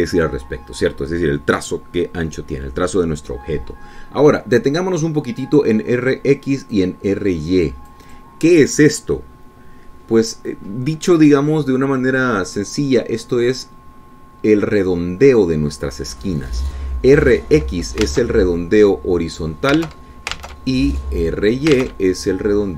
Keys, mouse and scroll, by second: 6.5-7.8 drag, 8.2-9.8 drag, 19.6 alt+Tab, 21.9 alt+Tab.